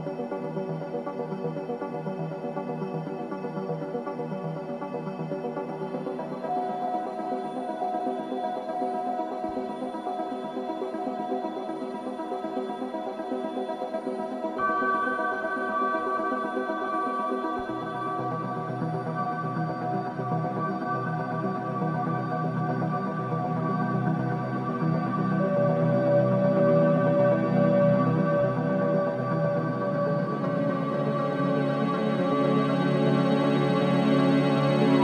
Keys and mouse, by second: 0.2-3.3 alt+shift+drag, 4.8 alt+click, 5.0-8.0 alt+drag, 8.2 3, 10.2-11.2 alt+shift+drag, 10.8 typing, 12.2 typing, 13.0 Return, 14.4 click, 15.1 alt+click, 15.6 alt+click, 16.5-17.5 drag, 18.1-21.2 drag, 19.2 typing, 21.2-22.0 typing, 23.4-24.2 alt+drag, 24.7-25.6 drag, 25.7 click, 26.5 click, 28.0-28.6 drag, 28.5 typing, 30.3 click, 31.2-32.1 typing, 32.4 Return.